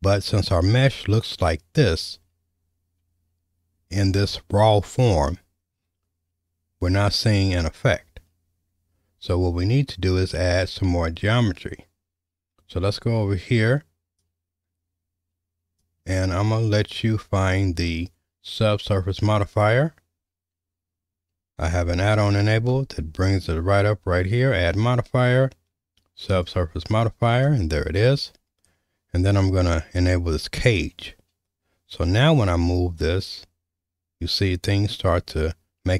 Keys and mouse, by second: 14.3-15.8 drag, 22.6 space, 32.5-35.9 drag.